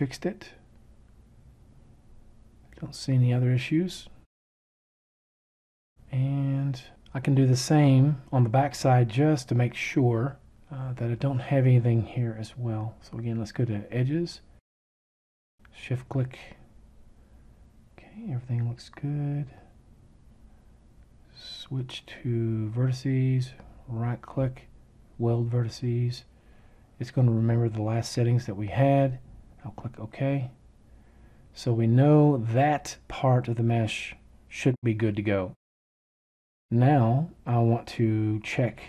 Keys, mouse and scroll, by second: 23.2-25.1 right drag.